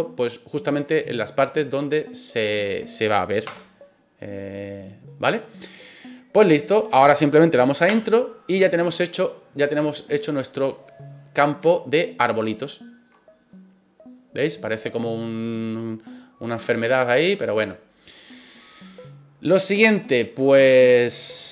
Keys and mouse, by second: 3.5 KP_0, 3.8-6.9 middle drag, 10.0-10.8 middle drag, 11.7-12.8 shift+middle drag, 13.5-15.3 middle drag, 20.2 right click.